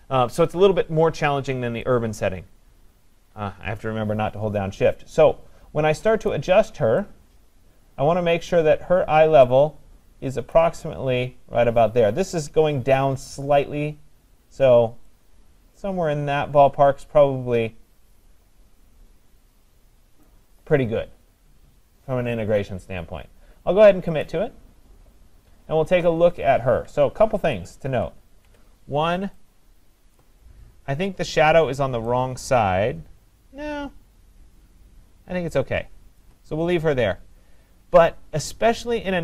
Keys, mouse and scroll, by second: 1.6 click, 6.3 click, 8.5 click, 10.5 click, 20.2 click, 24.3 click, 27.4 ctrl+=, 27.9 ctrl+=, 28.3 ctrl+=, 30.0 scroll, 30.2 click, 31.7-32.4 typing, 36.2 click.